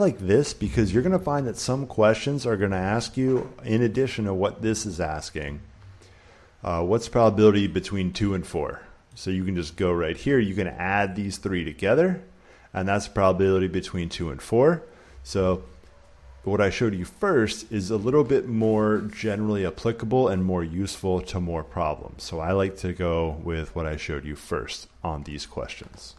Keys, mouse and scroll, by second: 0.4 click, 7.5 click, 9.0 click, 17.5-19.5 drag.